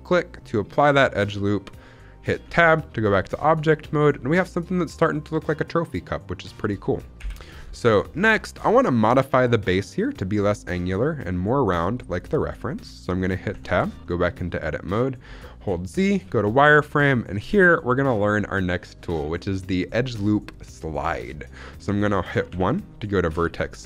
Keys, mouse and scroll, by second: 0.2-0.6 scroll down 2, 0.6-1.9 middle drag, 2.5 Tab, 2.8 scroll up 1, 3.1-6.3 middle drag, 7.1 scroll down 2, 7.1 KP_1, 7.7 shift+middle drag, 8.2-8.5 scroll up 4, 8.3 shift+middle drag, 9.2-9.6 scroll up 1, 12.7-13.3 scroll up 1, 13.3 scroll up 1, 13.4 Tab, 13.9 shift+middle click, 14.3-15.6 scroll up 2, 15.6 z, 16.4 shift+middle click, 16.7 scroll up 2, 18.2-18.6 scroll down 2, 22.4 1, 22.8-23.8 scroll up 2.